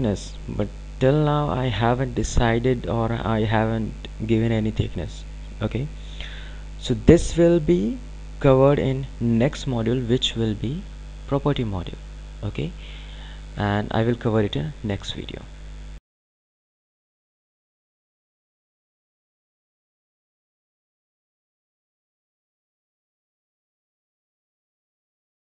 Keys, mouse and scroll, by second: 10.5 click.